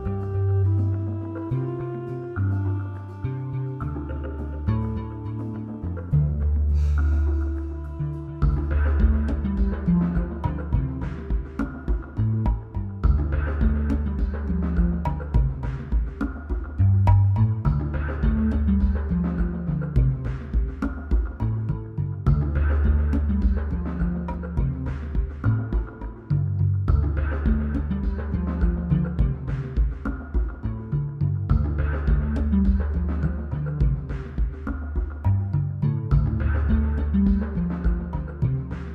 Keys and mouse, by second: 0.0 click, 0.2 middle click, 1.2 middle click, 2.0 middle click, 2.1 z, 3.4 middle click, 4.8-7.4 typing, 8.8 ctrl+s, 12.7-14.8 typing, 15.7 ctrl+KP_3, 16.6-17.6 drag, 18.0 click, 19.3 middle click, 19.9 click, 21.2 ctrl+z, 21.9 ctrl+z, 23.1-23.9 typing, 25.7 middle click, 26.6 middle click, 27.1 KP_1, 27.6 click, 27.8 z, 28.2 z, 28.5 z, 28.6 click, 29.4 click, 30.1 ctrl+z, 30.5 a, 30.5 l, 30.9 l, 30.9 z, 31.2-32.7 drag, 32.4 a, 36.9 click, 38.0 click.